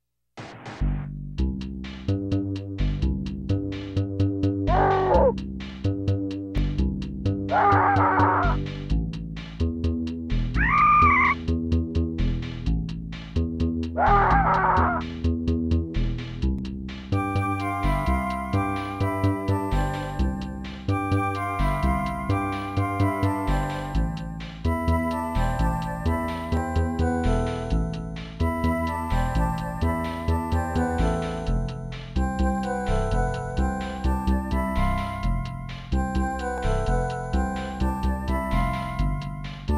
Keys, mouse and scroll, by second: 0.4-0.8 scroll down 2, 1.4 middle click, 2.2 scroll up 2, 3.5 ctrl+s, 3.7 click, 4.5 scroll up 2, 6.3 scroll down 2, 7.5 scroll down 1, 8.7-9.9 typing, 11.3 middle click, 11.9 scroll up 2, 12.7 right click, 13.1 right click, 13.4 right click, 13.9 right click, 14.3 right click, 14.8 right click, 16.0 right click, 16.4 right click, 16.8 right click, 17.7 right click, 18.1 right click, 19.1 scroll down 1, 20.0 scroll up 3, 20.7 right click, 21.8 right click, 23.0 right click, 23.4 right click, 23.7 right click, 24.5 right click, 25.1 right click, 26.3 scroll down 2, 28.1 scroll up 2, 28.4 scroll down 1, 29.0 right click, 29.8 right click, 30.5 right click, 31.2 right click, 31.8 right click, 32.5 right click, 32.8 right click, 33.5 right click, 33.9 right click, 34.8 right click, 36.1 middle click, 36.8 scroll up 2, 37.3 right click, 37.6 right click, 38.3 right click, 39.3 scroll down 2.